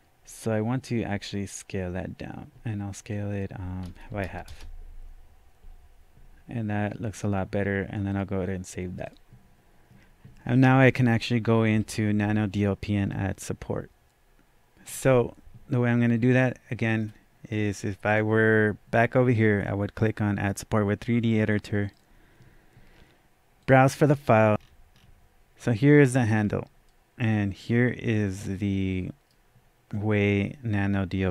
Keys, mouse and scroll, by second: 3.1 click, 4.1 KP_5, 4.3 KP_0, 4.5 KP_Enter, 8.1 click, 8.1 KP_Enter, 8.1 KP_0, 9.1 click, 11.8-13.5 scroll down 1, 16.9-20.7 drag, 16.9 scroll down 1, 21.8-23.6 drag, 24.5 double click, 24.9-25.5 scroll down 1, 25.5 scroll up 1, 26.8-31.3 right drag, 30.8-31.2 scroll down 1, 31.2 scroll up 1.